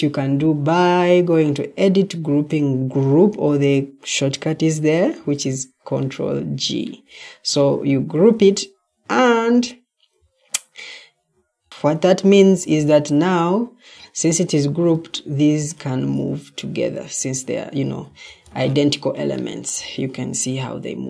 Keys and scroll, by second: 11.2 Escape, 12.1 Escape, 14.8 ctrl+d, 18.0 ctrl+d, 18.4 Escape, 20.7 Escape.